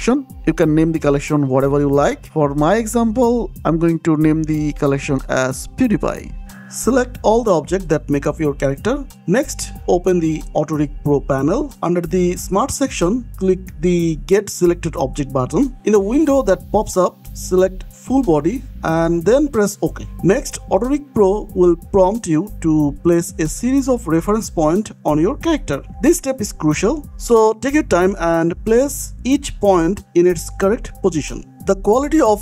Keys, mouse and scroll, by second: 0.0-1.1 typing, 3.5 click, 4.5 Left, 4.9 Right, 5.9 click, 6.9 scroll down 1, 7.1 click, 8.4 click, 8.6 scroll down 1, 9.0 shift+click, 13.9 click, 19.8 click, 20.4-20.9 scroll up 1, 21.4 middle click, 21.7 scroll up 1, 22.0 shift+middle click, 22.6 middle click, 23.9 click, 25.1 click, 26.6 click, 26.8 scroll down 1, 27.1 shift+middle click, 28.4 click, 29.7 click, 30.0 scroll down 1, 30.2 shift+middle click, 30.8 middle click.